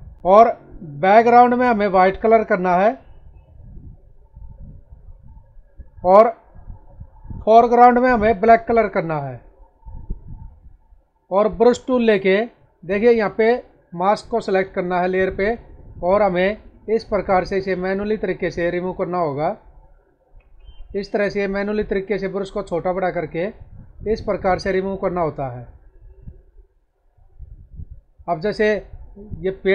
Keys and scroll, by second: 0.1 ctrl+z, 27.4 space.